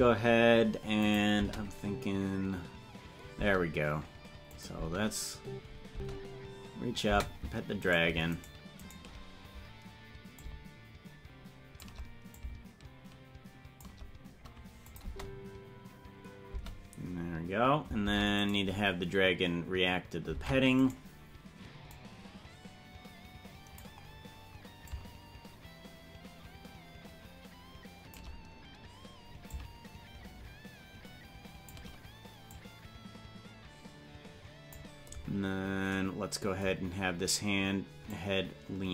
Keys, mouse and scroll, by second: 1.1 click, 1.3 space, 4.6 click, 4.8 space, 7.9 right click, 8.4 shift+right click, 10.3-11.8 shift+drag, 12.3-13.8 shift+drag, 14.9 click, 15.0 space, 16.6 space, 18.0 ctrl+Tab, 18.4 right click, 20.3 ctrl+Tab, 21.0 right click, 21.9-23.8 drag, 24.8-28.1 shift+drag, 29.4-31.9 shift+drag, 32.5-34.8 drag, 38.0-38.9 drag.